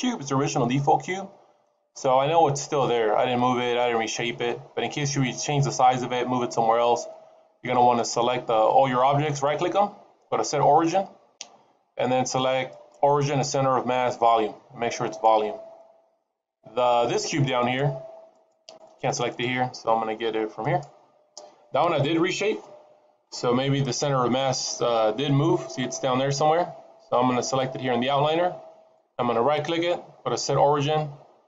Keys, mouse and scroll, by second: 0.4 middle click, 9.1 right click, 16.7 middle click, 17.4 click, 18.2 click, 18.5 click, 18.7 click, 19.0 click, 19.2 click, 20.4 click, 23.5 middle click, 24.1-25.1 scroll up 3, 25.1 middle click, 26.4-27.1 scroll down 1, 28.2-28.6 scroll down 1, 28.8 right click.